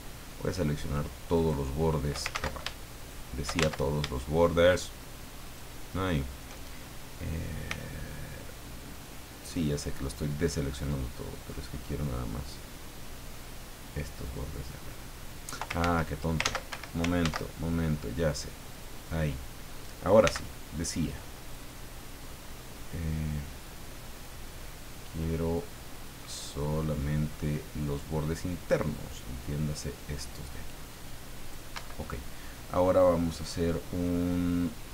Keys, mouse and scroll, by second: 1.3 shift+right click, 2.3 ctrl+shift+z, 3.0 shift+right click, 5.4 shift+right click, 7.7 c, 8.4-9.7 drag, 10.4-11.7 middle drag, 12.0-13.5 middle drag, 13.8-15.7 drag, 15.8 ctrl+z, 16.7 ctrl+Escape, 17.2 ctrl+z, 18.7 click, 20.2 c, 21.0 click, 22.5 middle click, 23.9-28.1 middle drag, 28.9-31.7 drag, 31.8 Escape.